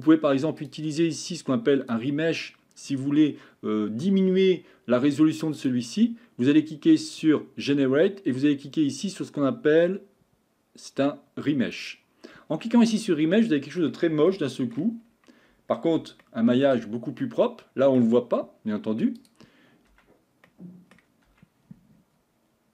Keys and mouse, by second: 1.3 click, 5.6-12.0 drag, 12.9-13.8 middle drag, 14.4-14.8 shift+middle drag, 16.1 Tab, 16.2 middle click, 17.2 middle click, 20.2 Tab, 20.5 middle click.